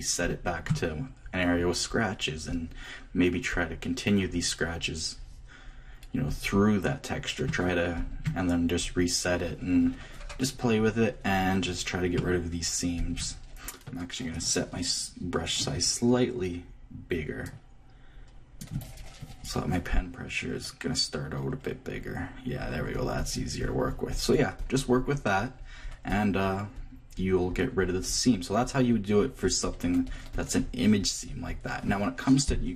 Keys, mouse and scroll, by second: 0.2-15.0 drag, 15.5-17.0 middle drag, 17.4-19.4 drag, 22.0-32.7 drag.